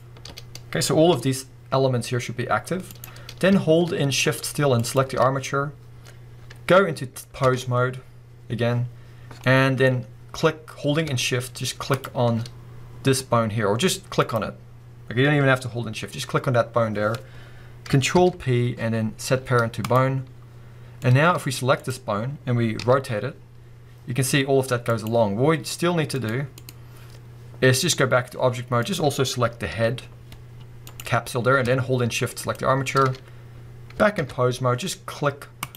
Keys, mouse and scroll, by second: 0.3 scroll down 1, 0.5-3.0 middle drag, 0.9 scroll down 2, 1.1 g, 3.0 right click, 3.2-4.8 scroll up 1, 4.8 shift+click, 5.4-6.3 scroll up 2, 5.5-7.5 middle drag, 6.3-7.5 scroll up 1, 7.5 ctrl+Tab, 9.4-11.9 middle drag, 11.9 shift+click, 14.2 click, 18.1 ctrl+p, 20.3-21.0 scroll down 2, 21.0-21.8 middle drag, 21.4-21.8 scroll up 2, 21.8 click, 22.8 r, 25.0 right click, 26.2-28.9 drag, 29.2-29.7 scroll down 1, 29.7 g, 31.0 right click, 31.1-32.4 scroll up 1, 32.4 shift+click, 34.2 ctrl+Tab, 35.6 click.